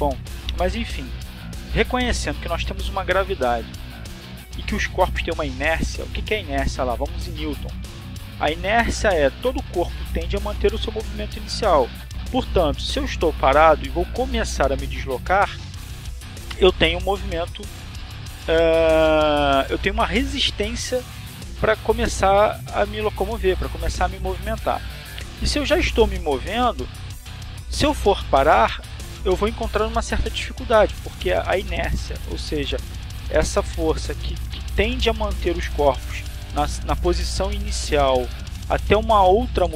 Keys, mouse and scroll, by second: 2.2-3.3 drag, 10.5 click, 12.1 click, 15.1-20.3 drag, 38.2 click.